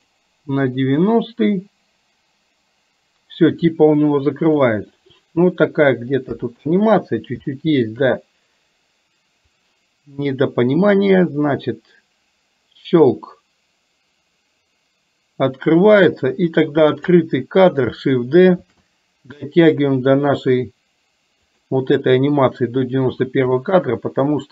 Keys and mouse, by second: 1.1-4.7 drag, 6.4 KP_1, 7.6 shift+middle click, 9.6-16.1 drag, 16.6 click, 18.7 shift+d, 23.7 middle click.